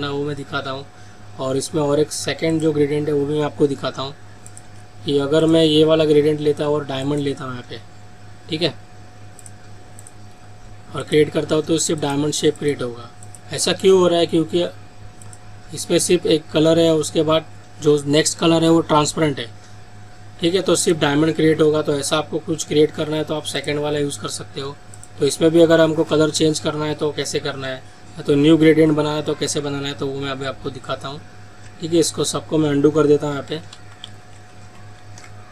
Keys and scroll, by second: 33.8 ctrl+alt+z.